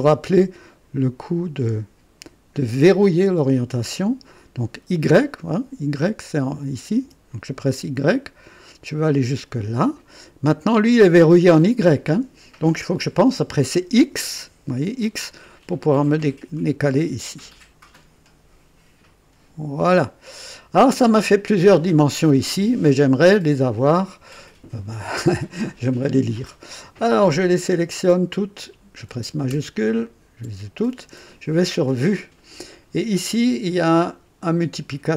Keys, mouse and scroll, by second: 2.8 click, 7.0 y, 9.5 click, 14.0 x, 19.7 click, 27.5 click, 30.0 shift+click, 31.7 click, 33.1 scroll up 1.